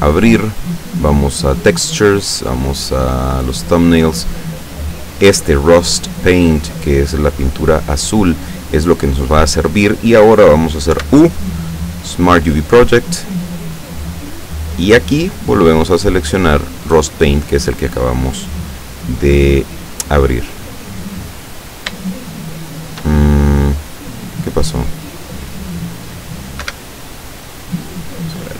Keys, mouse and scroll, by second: 1.6 click, 3.6 click, 6.6 click, 11.0 u, 12.0 click, 13.1 click, 15.4 click, 17.3 click, 19.1 click, 20.1 click, 21.5-22.1 scroll up 3, 22.3 shift+middle click, 24.4 click, 26.7 Escape, 27.1 click, 28.4 click.